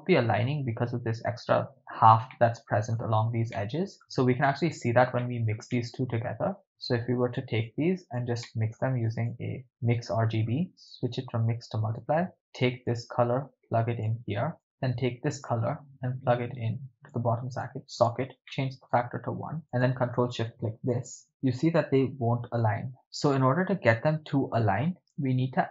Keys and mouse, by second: 2.3-3.0 shift+middle drag, 3.6 middle click, 4.4 ctrl+middle click, 5.2-5.6 ctrl+middle drag, 5.8 middle click, 6.7-7.4 drag, 7.7-8.2 drag, 8.4-8.8 middle drag, 9.0 shift+a, 10.8-12.0 drag, 12.9-14.1 drag, 14.6 click, 14.6 middle click, 15.5-17.2 drag, 17.6 click, 18.5-19.0 middle drag, 19.6 click, 20.1 ctrl+shift+click.